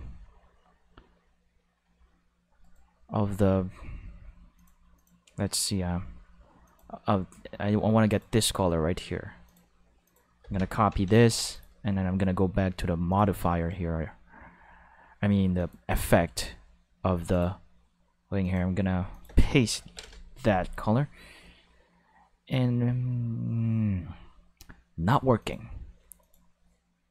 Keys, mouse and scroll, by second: 2.6 right click, 4.6 click, 5.0 click, 6.6 click, 8.1 click, 9.4 click, 10.0 click, 10.9 ctrl+c, 11.0 5, 11.1 ctrl+c, 11.3 5, 11.5 click, 13.1 click, 15.6 click, 17.3 click, 18.4 click, 19.1 click, 19.8 ctrl+v, 20.0 5, 20.0 Return, 20.1 5, 25.4 click, 26.2 click.